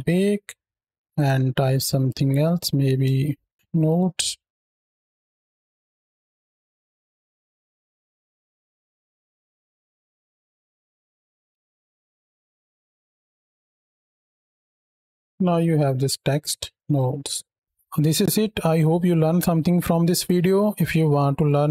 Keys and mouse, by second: 1.0-3.5 drag, 3.5 shift+Left, 3.9 space, 9.0 space, 9.0 z, 9.4 space, 9.9 z, 11.4 ctrl+space, 12.2 space, 13.2-15.2 space, 15.2 shift+Right, 16.7 KP_0, 16.7 space.